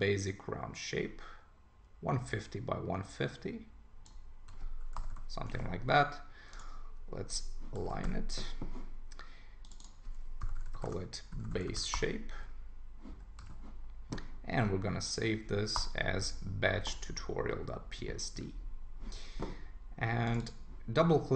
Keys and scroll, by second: 5.0 Return, 5.5 super+a, 7.8 super+d, 11.9 Return, 13.4 super+s, 15.7 Return.